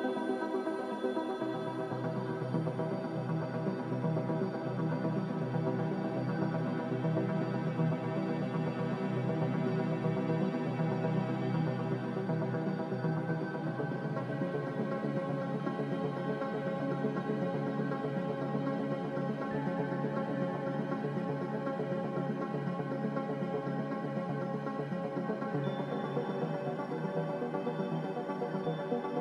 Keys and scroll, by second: 5.1 z, 6.4-7.3 typing, 9.0-9.8 typing, 15.7 c, 19.1 Escape.